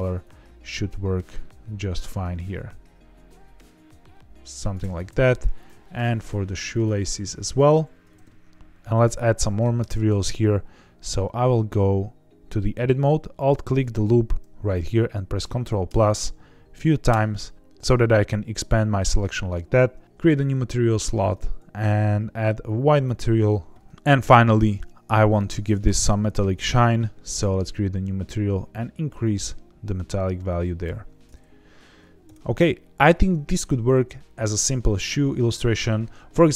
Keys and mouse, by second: 5.5 click, 5.9 click, 6.8 click, 9.4 middle click, 9.7 Tab, 11.0 3, 13.3 alt+click, 15.8 ctrl+KP_Add, 17.0 ctrl+KP_Add, 20.9 click, 23.7 Tab, 25.3 click, 27.2 click, 29.2 click, 32.2 KP_0.